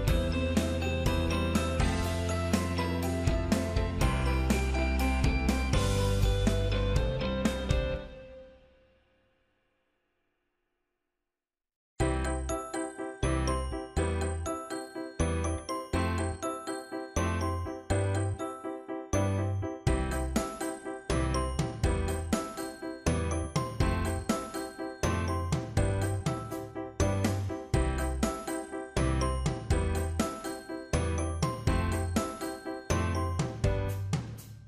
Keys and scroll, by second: 2.5 ctrl+z, 21.8 ctrl+z.